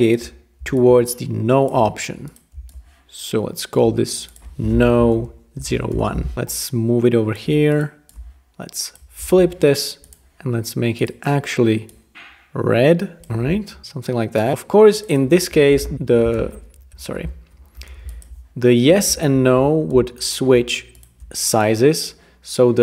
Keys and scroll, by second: 4.7-6.2 typing, 9.2 shift+v, 15.5-16.3 typing, 16.5 super+a, 16.9 super+z, 17.7 ⟲.